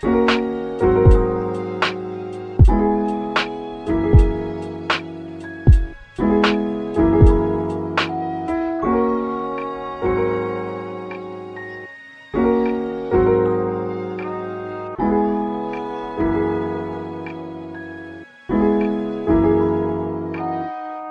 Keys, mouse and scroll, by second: 0.3 shift+d, 1.1 click, 1.3 r, 1.9 click, 2.6 click, 2.8 shift+d, 3.9 click, 4.3 r, 5.9 click, 6.1 shift+d, 7.3 click, 7.7 r, 9.0 click, 10.9 click, 11.2 shift+d, 11.9 click, 12.3 r, 12.6 click, 13.8 shift+d, 14.8 click, 15.5 r, 16.3 click, 16.5 g, 16.9 click, 17.5-20.9 drag, 18.0 shift+d, 19.5 r, 20.9 scroll down 1.